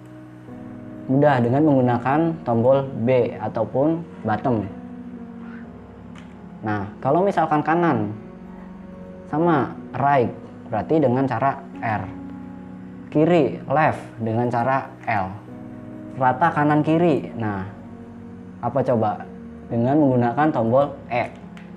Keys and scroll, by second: 6.6 b, 12.2 r, 15.5 l.